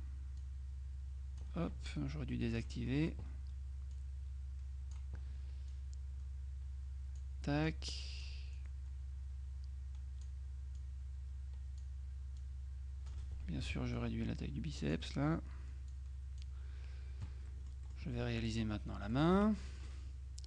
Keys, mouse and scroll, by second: 0.5-2.0 drag, 2.6 click, 4.0-5.5 drag, 5.8-7.8 drag, 8.6 click, 10.8-12.4 drag, 12.4-13.7 drag, 13.7 F2, 14.1-15.5 drag, 16.0 click, 17.6 middle click, 19.2 middle click, 19.4 F6.